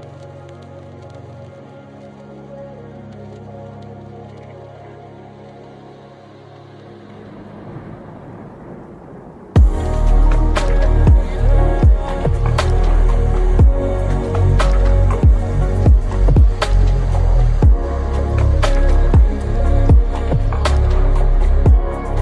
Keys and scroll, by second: 1.1 l, 8.3 c, 8.7 l.